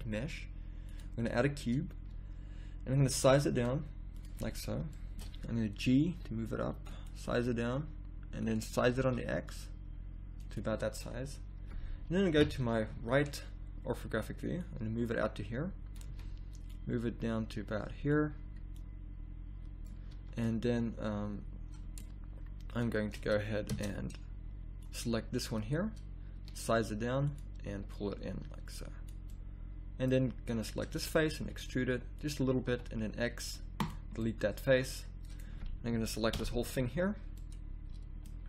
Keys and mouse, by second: 1.0 ctrl+z, 2.9 s, 5.8 g, 6.9 click, 7.3 s, 8.8 s, 12.3 KP_3, 12.9 z, 16.1 z, 20.1 z, 23.7 Tab, 24.8 click, 26.3 s, 31.4 e, 32.7 x, 36.3 ctrl+l.